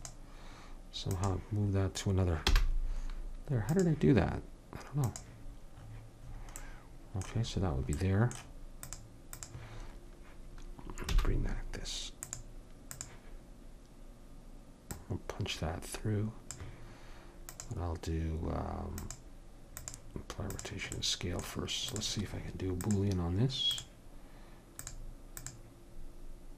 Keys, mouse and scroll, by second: 2.4 m, 5.1 click, 5.9-7.1 middle drag, 8.8-10.0 middle drag, 10.0-11.1 drag, 11.1 t, 12.2-14.0 drag, 14.9-16.7 drag, 17.5-19.0 drag, 20.6 click, 21.9-26.5 drag.